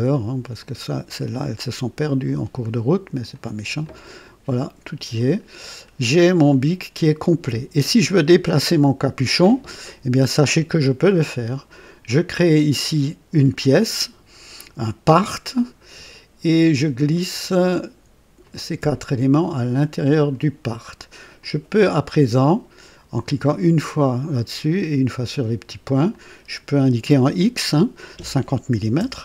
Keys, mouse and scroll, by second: 0.5 click, 2.2 click, 3.3 click, 3.8 click, 5.1 click, 5.7-6.1 scroll down 1, 6.4-7.6 right drag, 14.8 click, 15.8 scroll down 1, 17.2 click, 18.4 shift+click, 19.0-20.5 shift+drag, 21.3 click, 23.4 click, 24.7 click, 26.0 click, 28.6 KP_5, 28.9 KP_0.